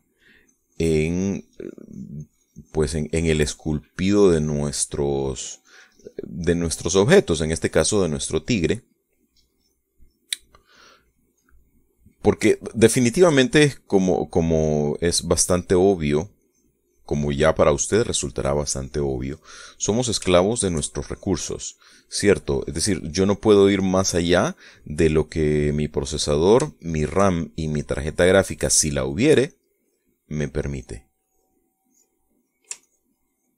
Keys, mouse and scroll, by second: 0.6 middle click, 1.3-4.9 drag, 5.1 middle click, 5.9 click, 6.4-7.6 drag, 7.7-9.0 drag, 9.0-10.1 middle drag, 10.3 click, 10.8 click, 11.3 click, 12.3 middle click, 13.4-14.9 shift+middle drag, 15.1-16.6 drag, 16.6 middle click, 20.0 click, 20.2 middle click, 21.2 shift+middle click, 21.8 shift+middle click, 22.1 click, 22.6 click, 23.3 click, 23.9 click, 25.0 click, 25.6 click, 26.2 click, 26.8 middle click, 27.6 shift+middle click, 28.4-30.2 shift+drag, 30.4 click, 31.2 click, 32.1 click, 32.7 click.